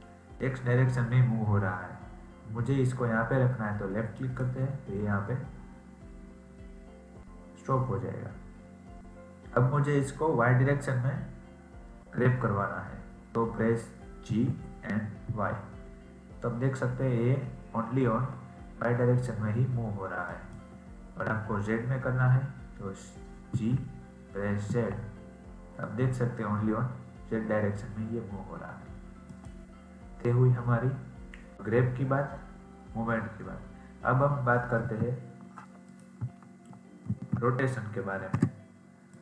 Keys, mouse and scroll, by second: 34.8 g, 37.0 ctrl+n.